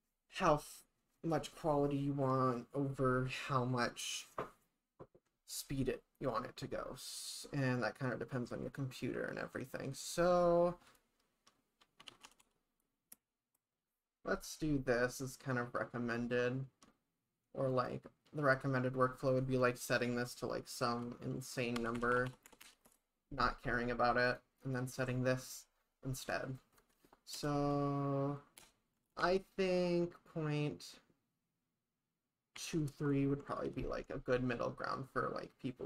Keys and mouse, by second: 12.4 0, 17.8-23.5 drag, 22.1 0, 22.3 0, 22.6 0, 24.3-34.2 drag, 29.1 BackSpace, 34.0 ctrl+s.